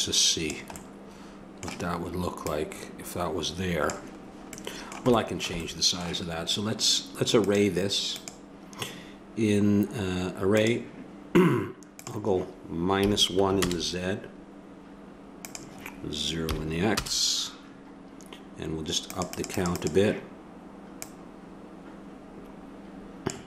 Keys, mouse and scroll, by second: 2.5-4.6 drag, 7.4-10.0 drag, 12.0-13.8 drag, 15.4-17.2 drag, 19.1-22.9 drag.